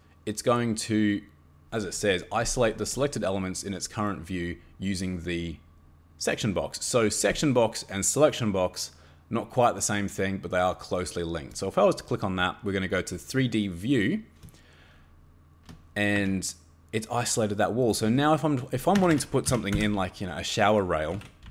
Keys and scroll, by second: 16.2 Escape, 19.0 Escape, 19.1 Escape, 19.4 c, 19.7 ñ, 20.8-21.5 typing.